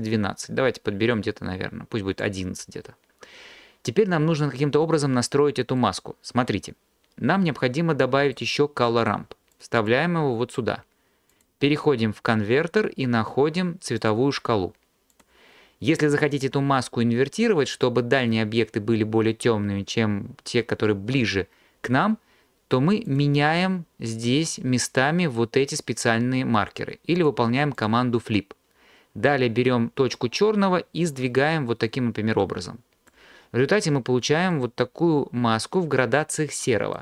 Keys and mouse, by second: 8.9 middle click, 9.6 click, 11.4-14.1 drag, 15.2 click, 23.1-25.5 drag, 27.2-28.0 drag, 30.8-33.5 drag.